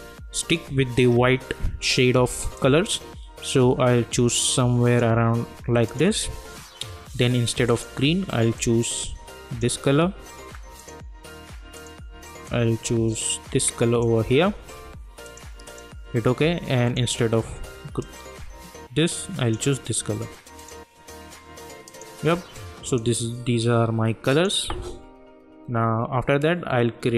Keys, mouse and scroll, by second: 2.5-20.6 drag.